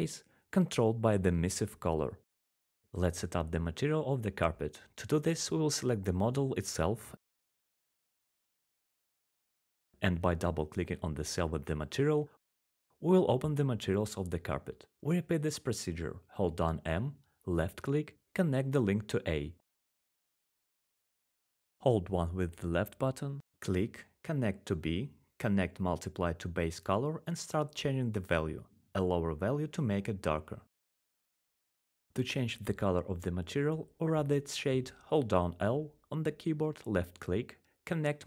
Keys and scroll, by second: 0.1-1.1 typing, 1.4 Return, 5.7-6.5 typing, 8.6-9.2 typing, 17.9-18.4 typing, 19.8 1, 20.3 1, 37.9-38.2 typing.